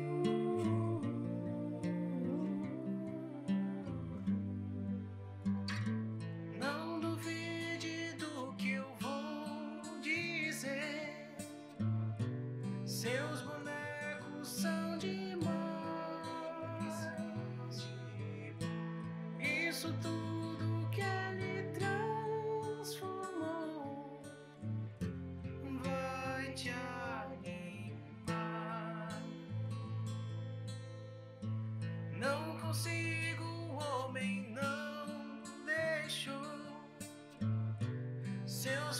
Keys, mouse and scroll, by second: 11.9 click, 12.1-12.7 scroll down 2, 12.4 r, 12.8 KP_1, 12.9 KP_Decimal, 13.1 shift+middle click, 13.3 scroll down 1, 13.6 g, 14.7 shift+middle click, 14.7 scroll up 2, 14.9 click, 15.3 alt+g, 15.5 click, 15.8 alt+g, 16.4 click, 16.7 alt+g, 16.8 click, 17.0 alt+g, 17.2 click, 17.8 click, 18.1 alt+g, 18.2 click, 18.6 click, 18.8 alt+g, 19.0 click, 19.3 alt+g, 19.5 click, 19.9 alt+g, 20.1 click, 20.4 g, 21.9 click, 22.1-25.1 typing, 22.6 click, 23.3 click, 23.9 click, 24.9 click, 26.1 shift+middle click, 26.1 scroll down 4, 26.5 click, 26.7 middle click, 27.2 r, 27.8 middle click, 28.3 middle click, 28.4-29.1 scroll up 4, 28.5 middle click, 28.9 click, 29.1 middle click, 29.4 g, 30.0 click, 30.2 middle click, 30.5 g, 31.1 middle click, 31.3 click, 31.6 g, 31.8 click, 32.1 g, 33.0 click, 33.1 middle click, 33.4 shift+middle click, 33.6 click, 34.0 middle click, 34.2 r, 34.6 g, 35.6 r, 36.8 click, 37.0 g, 37.7 middle click, 38.5 click, 38.8 g.